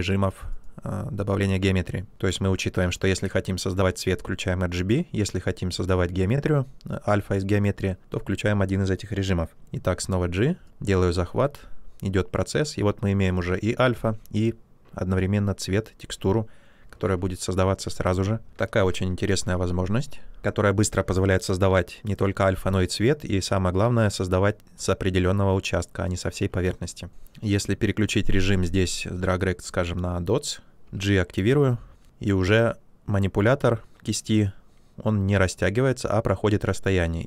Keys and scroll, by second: 9.7 g, 18.7 ctrl+z, 30.9 g.